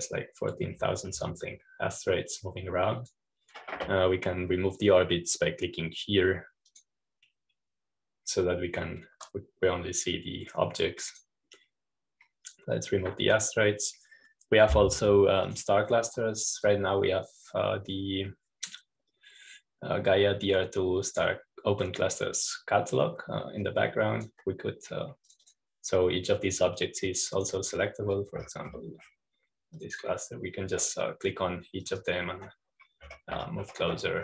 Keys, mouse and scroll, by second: 0.7-2.6 drag, 0.7 ., 4.3-5.7 drag, 8.6-10.7 drag, 13.0-16.4 drag, 17.4 click, 18.5-32.5 drag, 29.9-31.7 scroll up 1, 33.7-34.2 drag.